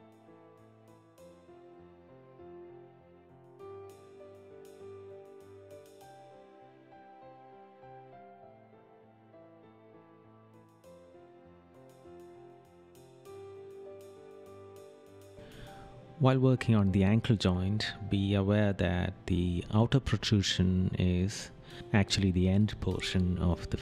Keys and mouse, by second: 3.2 right click, 4.9 right click, 6.4 right click, 7.3 right click, 9.0 right click, 10.7 right click, 12.7 right click, 14.6 right click, 16.0 right click, 17.2 right click, 17.9 right click, 19.6 right click, 20.6 right click, 21.5 right click, 22.3 right click, 23.7 right click.